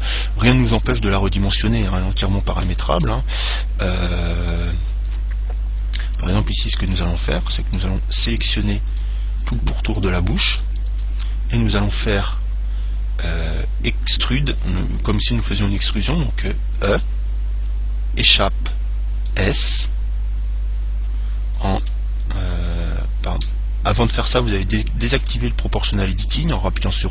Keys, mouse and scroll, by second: 1.1 Tab, 2.0-3.9 middle drag, 3.6 ctrl+Tab, 7.2-12.6 right drag, 17.2 e, 19.6 s, 25.5 o.